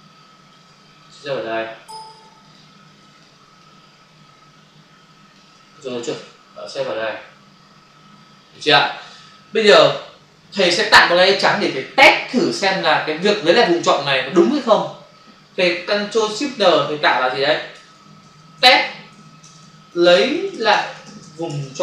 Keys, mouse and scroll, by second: 1.0 ctrl+click, 2.4 ctrl+click, 3.1 ctrl+double click, 3.6 click, 5.8 ctrl+click, 6.6 click, 9.0 click, 16.6 ctrl+shift+n, 17.6-19.6 typing, 21.1 space.